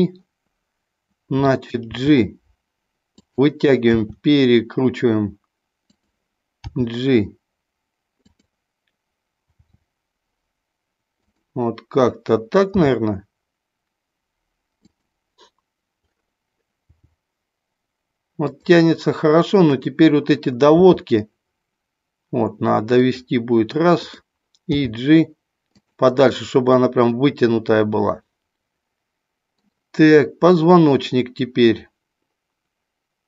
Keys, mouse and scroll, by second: 1.9 g, 3.3 click, 3.8 r, 6.7 g, 8.1 click, 9.7 r, 12.8 g, 14.8 click, 16.8 g, 18.5 click, 19.6 click, 20.8 r, 23.0 click, 23.9 click, 24.6 g, 26.6-29.6 middle drag.